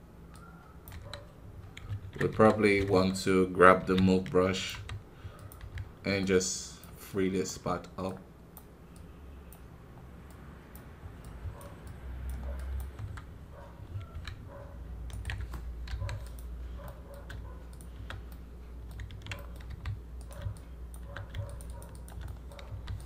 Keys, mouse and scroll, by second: 0.3 click, 0.9 KP_1, 1.4 scroll down 2, 2.2 KP_1, 3.8 f, 6.1-12.9 drag, 12.9 KP_1, 14.2 ctrl+Tab, 15.4-15.8 scroll up 1, 15.8 i, 16.1 click, 16.8 middle click, 17.1 scroll up 1, 18.3-22.6 middle drag, 22.6 f.